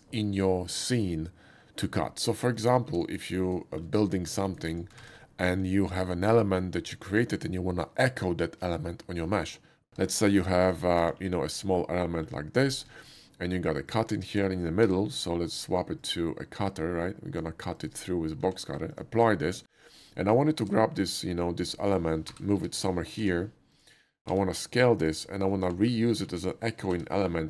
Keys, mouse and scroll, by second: 2.6 click, 2.9 x, 3.6 shift+middle click, 4.2 shift+middle click, 4.5 shift+click, 4.7 click, 4.7 x, 5.1 shift+a, 6.3 click, 9.9 Tab, 10.2 click, 10.7 shift+click, 11.1 ctrl+b, 12.6 click, 12.8 Tab, 13.9 click, 14.8 d, 15.5 click, 16.0 click, 16.7 click, 18.5 q, 19.7 middle click, 20.2 middle click, 21.6 shift+right click, 21.9 shift+d, 22.3 g, 22.6 y, 23.2 x, 23.8 click, 24.3 s, 25.0 click, 25.5 middle click, 25.8 alt+middle click, 26.0 alt+middle click, 26.9 g.